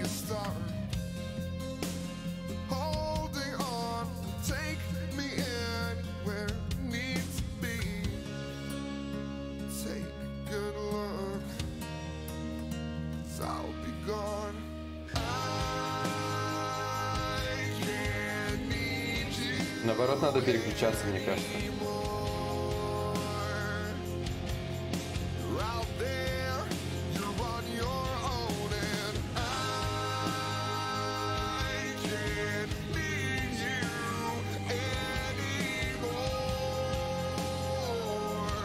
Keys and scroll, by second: 4.3 s, 16.1 ctrl+z.